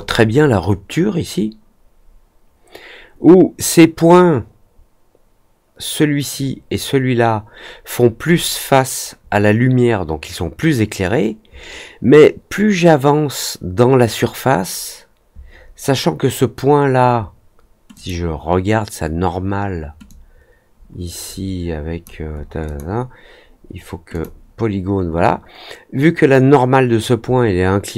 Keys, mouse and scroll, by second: 17.9 click, 20.0-22.0 drag, 22.6 click, 24.0 click.